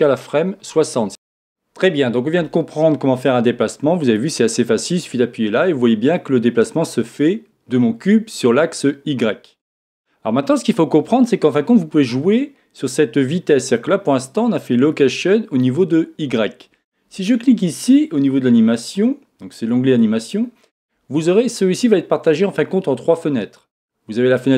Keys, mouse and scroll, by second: 4.2 click, 5.0-6.6 drag, 7.1 click, 19.9 click.